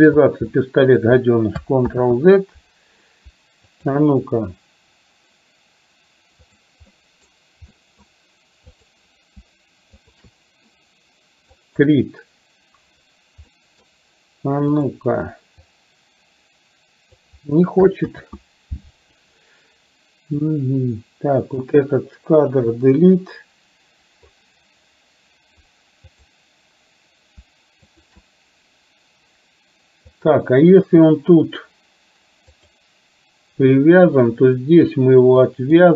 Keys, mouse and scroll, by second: 0.6 middle click, 2.0 ctrl+z, 3.9 click, 7.1 middle click, 7.7-8.2 middle drag, 8.9 click, 10.0 shift+click, 11.9 click, 13.6 middle click, 14.7 click, 15.9-17.4 drag, 18.2 ctrl+z, 20.5-21.7 drag, 22.7 Delete, 26.2 click, 28.0 shift+click, 30.2 click, 32.7 click, 35.5 click.